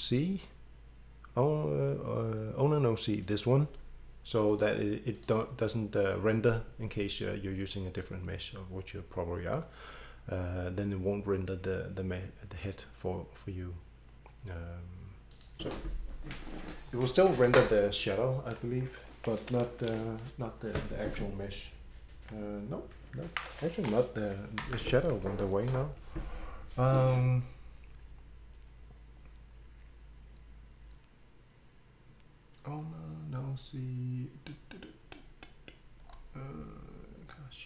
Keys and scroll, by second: 25.8 Escape.